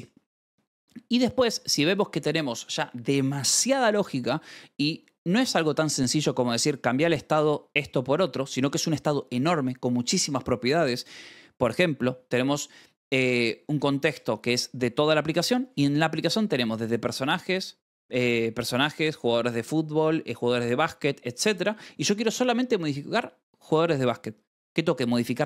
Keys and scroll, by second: 0.8-1.8 typing, 14.5 k.